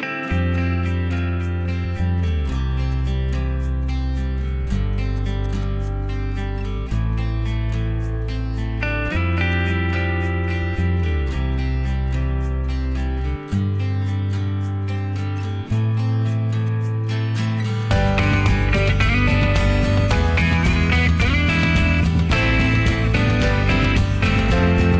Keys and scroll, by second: 10.9-14.5 typing, 18.8 ctrl+x, 19.2-19.6 Escape, 20.8 ctrl+a, 21.8 ctrl+h.